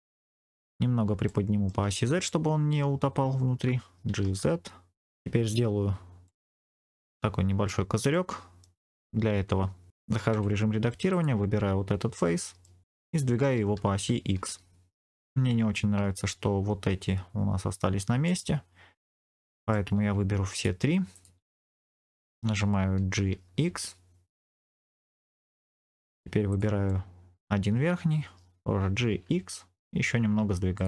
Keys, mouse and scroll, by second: 0.6 scroll up 2, 1.2 shift+middle click, 1.9 scroll down 2, 4.0 g, 4.1 z, 5.0 click, 5.0 middle click, 5.8-6.2 scroll up 2, 6.2 middle click, 8.0 middle click, 10.2 Tab, 11.0 click, 12.1 middle click, 13.3 g, 14.3 x, 18.1 right click, 19.1 middle click, 20.4 shift+click, 21.0 shift+click, 21.4 middle click, 23.1 g, 23.6 x, 25.4 click, 25.6 middle click, 26.4 click, 26.8 middle click, 28.7 g, 29.0 x, 30.6 click.